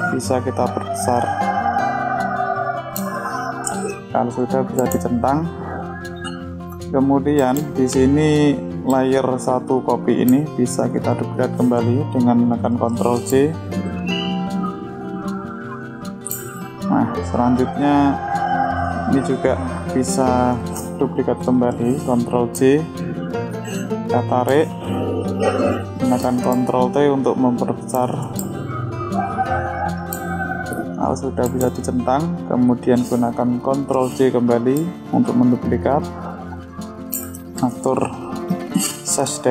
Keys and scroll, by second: 11.6 ctrl+j, 22.1 ctrl+j, 26.5 ctrl+t, 32.9 ctrl+j.